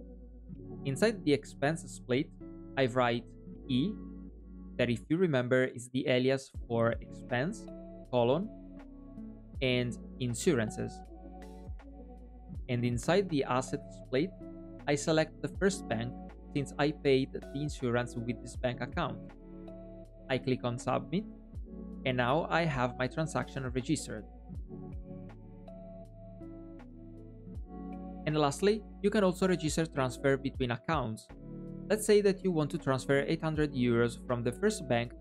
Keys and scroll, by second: 32.3 super+p.